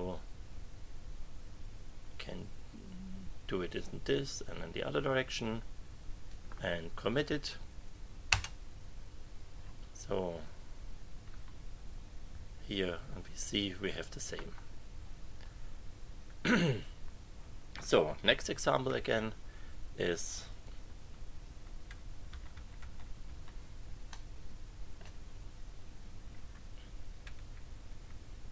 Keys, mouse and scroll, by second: 8.3 Return, 10.0 click, 11.3 KP_1, 20.8 Down, 21.9 Up, 24.1-25.1 drag, 26.3 Right, 27.3 Left.